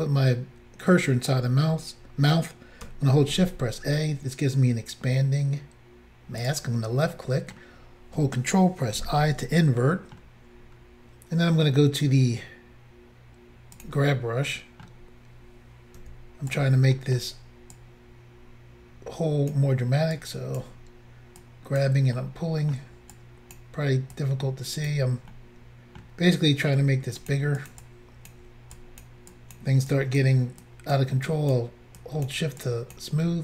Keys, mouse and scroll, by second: 3.3 a, 6.4 click, 7.2 middle click, 9.0 ctrl+i, 9.8 middle click, 10.7-11.4 scroll down 1, 13.8 click, 13.9 click, 14.5 middle click, 16.0 f, 16.5 click, 16.6 click, 17.0 middle click, 17.8 click, 20.2 click, 21.5 click, 22.2 middle click, 23.6 middle click, 23.6 click, 24.2 click, 25.4 middle click, 27.2 shift+click, 27.3 shift+click, 27.6 shift+click, 27.7 shift+double click, 27.8 shift+click, 28.8 click, 29.4 click, 29.9 click, 30.7 click, 31.3 click, 32.0 click, 32.6 click.